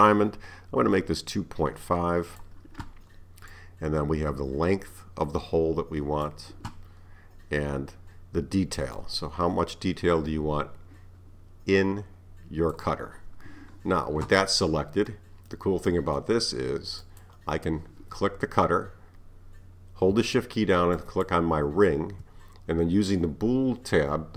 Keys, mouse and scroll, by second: 3.5-6.5 drag, 8.0 scroll down 3, 9.0-12.0 drag, 14.6-17.1 middle drag, 17.1 click, 21.0 shift+click.